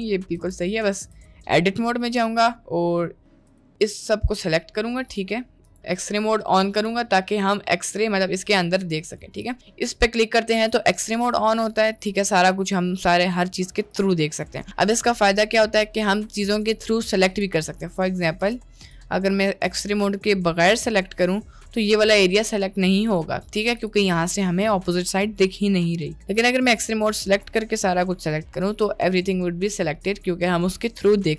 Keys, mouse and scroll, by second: 0.8 middle click, 1.0 Tab, 1.3 middle click, 2.3 middle click, 3.2 middle click, 3.4 3, 3.8 click, 5.1 click, 7.5 click, 11.1 middle click, 11.7 Tab, 12.1 middle drag, 12.4 click, 13.9 click, 15.0 click, 16.1 Tab, 16.4 click, 17.4 click, 18.4 click, 19.0 click, 19.8-20.8 drag, 21.2 middle click, 23.8 click, 26.8 click, 27.8 middle click, 29.6 middle click.